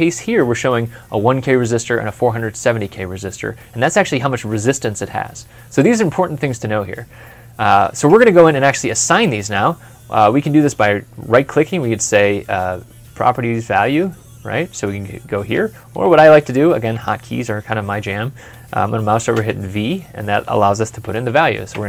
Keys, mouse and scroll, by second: 7.0 ctrl+F12, 8.9 middle click, 10.5 right click, 15.7 Escape, 19.2 v, 21.5 typing.